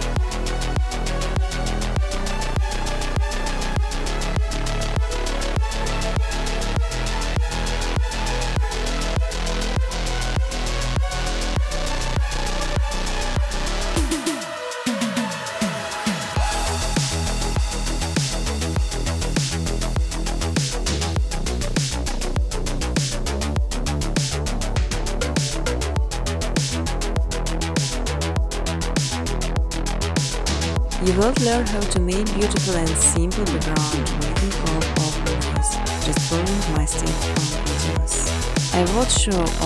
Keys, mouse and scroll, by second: 0.5 click, 3.7 click, 6.6 click, 7.7-10.1 typing, 11.5 click, 11.6 ctrl+c, 11.9 click, 12.6 click, 13.3 click, 13.5 ctrl+v, 13.9 click, 14.7 click, 15.6 click, 15.8 ctrl+v, 16.2 click, 17.0 click, 18.1 click, 20.5 click, 21.5 click, 23.5-24.7 typing, 25.9 click, 26.4-27.7 typing, 29.5 click, 29.8 click, 31.7 click, 32.1 click, 32.6 click, 33.3 click, 35.6-36.6 typing, 37.3 Tab, 37.7-38.3 typing, 38.8 Tab, 39.4 click.